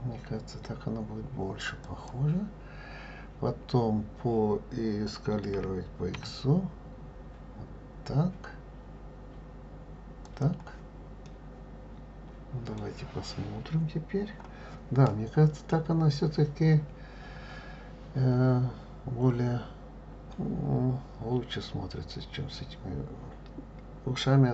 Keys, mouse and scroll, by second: 5.6 s, 11.2-14.3 middle drag.